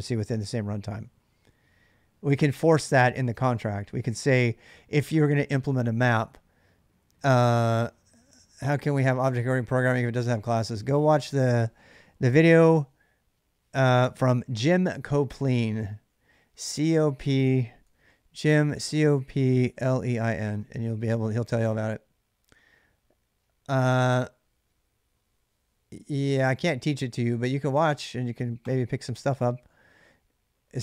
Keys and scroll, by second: 3.0 k, 3.1 k, 17.4-20.5 typing.